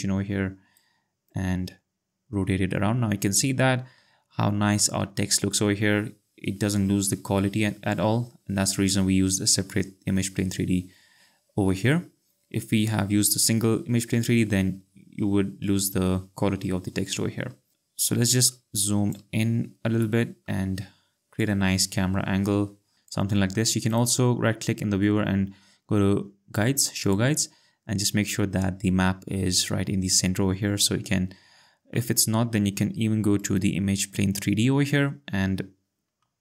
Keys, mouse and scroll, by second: 1.0 click, 1.3 click, 4.4-5.1 ctrl+scroll, 7.1-7.8 scroll, 11.3-11.9 scroll, 17.6 ctrl+scroll, 18.4 click, 19.5-19.8 ctrl+scroll, 21.4 ctrl+click, 23.9 right click, 27.0 click, 33.4 click.